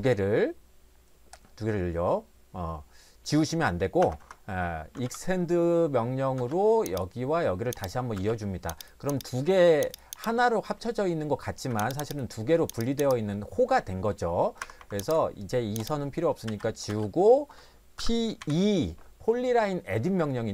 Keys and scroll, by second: 4.0 Escape, 4.2 Escape, 4.9 typing, 6.4 space, 8.2 space, 11.7 Escape, 14.6 Escape, 14.8 Escape, 16.4 e, 16.9 space, 18.0 p, 18.4 e.